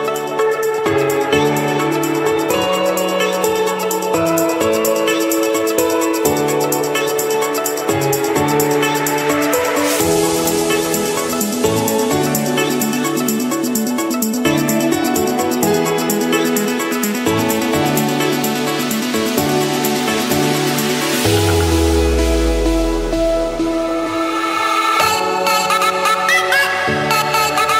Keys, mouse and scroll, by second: 1.0 click, 1.4 click, 1.8 click, 2.1 click, 2.6 click, 2.9 click, 3.3 click, 3.8 click, 4.0-4.9 scroll down 10, 6.6-7.7 drag, 7.9 click, 8.8-9.4 scroll down 7, 9.4-10.2 scroll up 13, 10.6-11.2 scroll, 11.6 click, 11.8-12.2 scroll down 4, 12.3-12.9 scroll up 7, 14.6 click, 14.7-15.6 scroll, 16.1 click, 18.3-20.3 drag, 20.3-21.5 middle drag, 22.0 click, 22.6 middle click, 22.8 Escape, 24.0-24.9 typing, 25.9 Return, 27.1 click, 27.5 click.